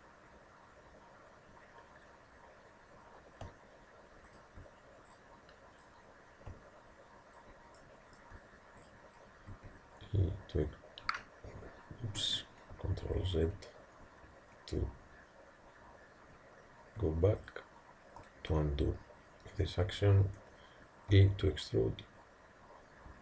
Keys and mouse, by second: 5.1-7.6 drag, 7.8-9.6 middle drag, 8.9 click, 9.6 e, 13.1 ctrl+z, 17.4 click, 21.2 e.